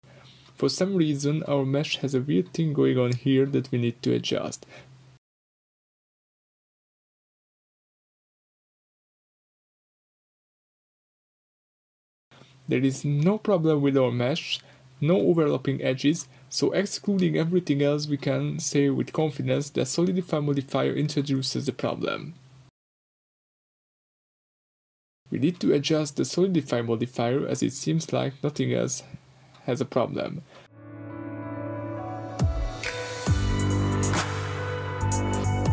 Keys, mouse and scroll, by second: 0.0-1.9 drag, 1.9-6.0 middle drag, 3.5-4.4 scroll up 4, 5.1-6.0 scroll down 2, 6.0-13.5 drag, 13.5-14.5 middle drag, 14.5-17.1 drag, 16.2 Tab, 17.1-19.7 middle drag, 17.8-18.1 scroll up 2, 18.5 scroll down 2, 18.7 Tab, 19.1-19.7 scroll up 2, 19.7-20.1 drag, 20.7-21.2 drag, 21.2 Tab, 21.4-22.6 middle drag, 21.7-22.2 scroll up 2, 22.2-22.6 scroll down 2, 22.6 g, 23.0 click, 23.2-24.7 shift+middle drag, 23.4 scroll up 2, 23.9-24.3 scroll up 2, 24.7 click, 25.4 2, 25.6 click, 26.0 g, 27.3 Escape, 27.3 scroll down 1, 27.4 Tab, 27.5-28.8 middle drag, 27.8-28.2 scroll up 2, 28.8-29.2 right drag, 29.2-30.8 middle drag, 30.8 click, 31.1 drag, 32.4-33.1 scroll up 1, 33.6-35.7 drag.